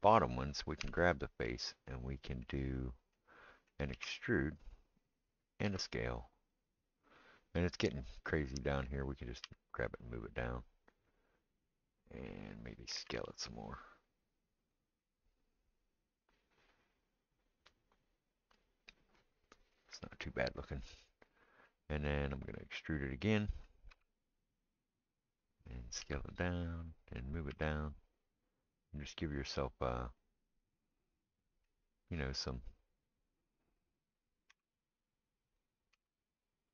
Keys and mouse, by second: 0.8 3, 1.0 click, 1.0 middle click, 3.9 e, 5.6 s, 9.4 g, 13.0 s, 16.1-18.2 middle drag, 18.2-20.4 right drag, 20.4-22.8 middle drag, 22.8-36.7 right drag, 23.9 e, 26.0 s, 27.5 g, 34.5 e, 35.9 s.